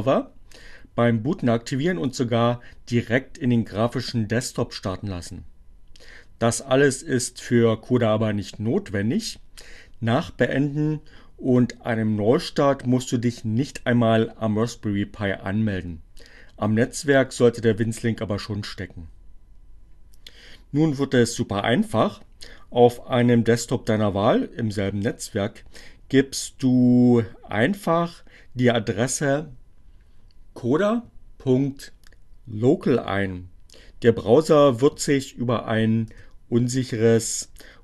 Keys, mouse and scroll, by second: 34.2 KP_Enter.